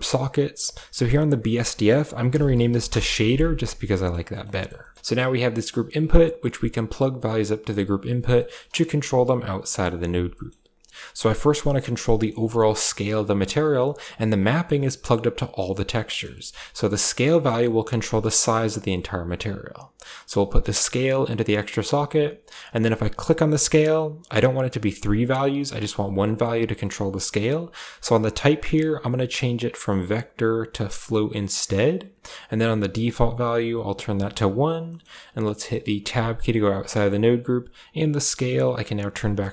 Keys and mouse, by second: 0.9 click, 1.1-2.7 drag, 4.2 click, 4.7 drag, 4.9 a, 5.3 click, 5.6 g, 8.3 middle drag, 8.6 Tab, 9.9 Tab, 10.2 middle click, 11.2 click, 12.0 middle click, 12.4 click, 12.9 click, 13.6 click, 14.4 middle click, 16.0 middle click, 17.3 middle click, 18.4 middle click, 20.2-21.0 drag, 21.2 click, 23.1 click, 28.6-30.9 drag, 32.8-34.1 drag, 34.8 middle click, 35.8 Tab, 38.2-39.3 drag.